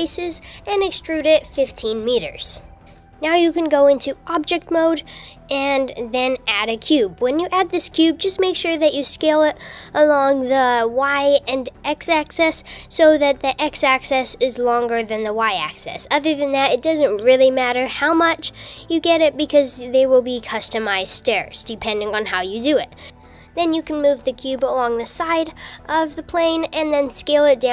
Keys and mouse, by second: 0.0 super+z, 0.3 e, 3.6 Tab, 3.6 click, 4.7 shift+a, 4.9 shift+a, 6.9 KP_5, 7.6 KP_7, 8.6 g, 13.3 super+z, 14.0 s, 17.6 h, 17.6 u, 18.0 super+z, 18.4 g, 24.2 s.